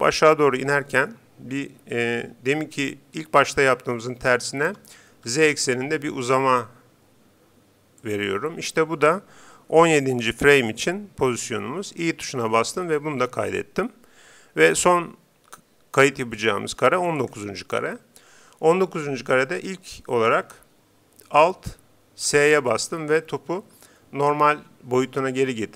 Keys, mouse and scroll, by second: 4.7 s, 12.6 i, 16.9-19.0 drag, 22.5 alt+s.